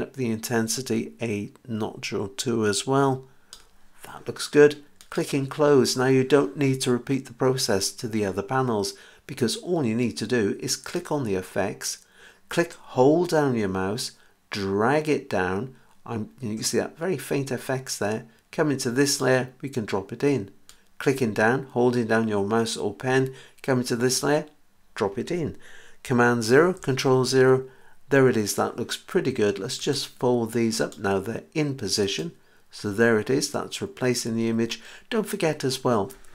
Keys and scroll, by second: 26.5 super+0.